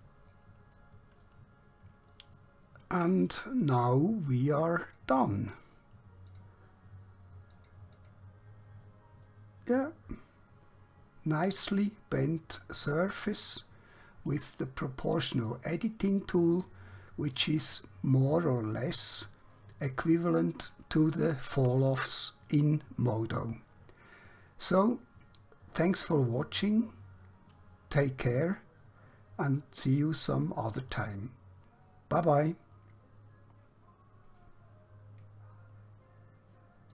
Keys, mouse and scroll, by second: 1.3 shift+middle click, 4.9 click, 9.4 middle click.